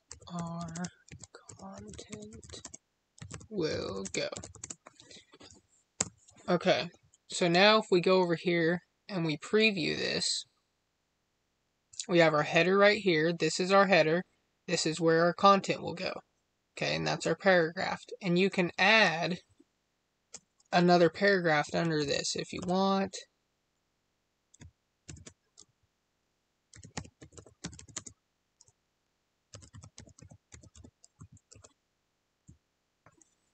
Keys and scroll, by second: 0.6 space, 2.5 space, 3.9 space, 4.5 space, 27.9 space.